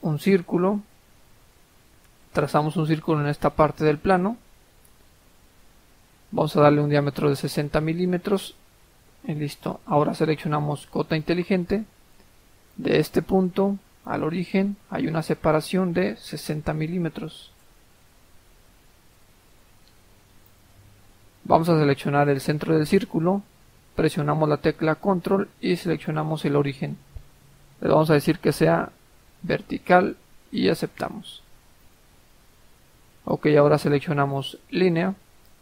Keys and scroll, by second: 7.0-7.9 typing, 8.3 Return, 8.8 Escape, 16.8 typing, 17.5 Return, 19.2 Escape.